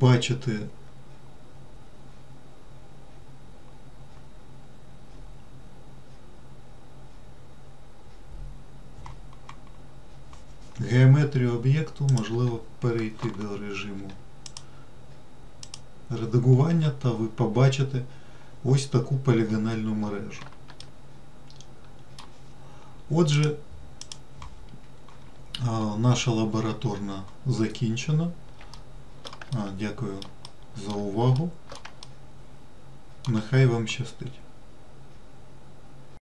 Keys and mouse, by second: 12.4 click, 12.6 Tab, 15.0-16.0 drag, 21.1-22.5 shift+middle drag, 23.7 click, 29.1 shift+middle click, 29.9 alt+middle click, 32.7 middle click.